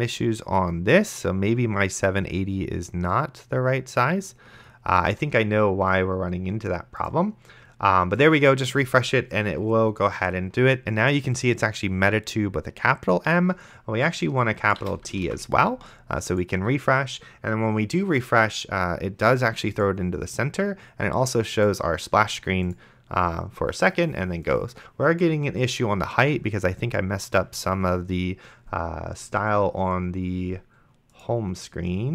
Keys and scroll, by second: 15.5 ctrl+s.